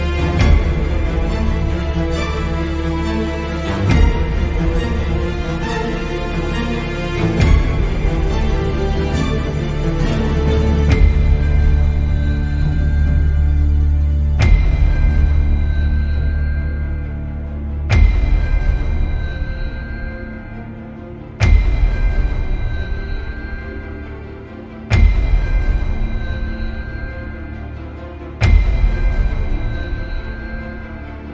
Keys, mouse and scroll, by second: 3.1-4.8 drag, 5.4-6.4 drag, 7.1 click, 9.1 click, 10.6-12.1 middle drag, 14.3 click, 15.5-19.6 drag, 23.6-24.2 middle drag, 26.1-29.4 drag, 30.1-31.3 drag.